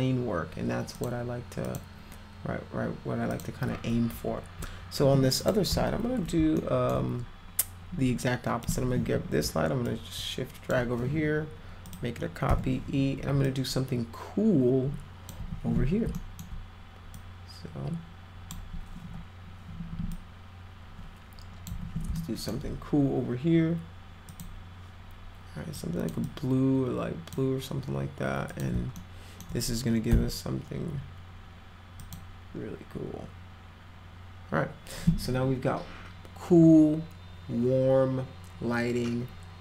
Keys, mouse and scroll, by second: 1.0 click, 1.7 click, 3.3 click, 5.4 click, 6.6 alt+middle click, 8.7 click, 9.1 w, 9.9 shift+click, 11.9 click, 12.5 e, 13.4-15.3 drag, 16.2 alt+middle click, 17.1-18.7 drag, 19.1 e, 19.5-19.8 scroll up 4, 20.1-21.7 drag, 21.7 w, 22.2 alt+middle click, 24.3 click, 25.8 click, 26.2-27.4 drag, 28.5 click, 29.0 alt+middle click, 32.0 click.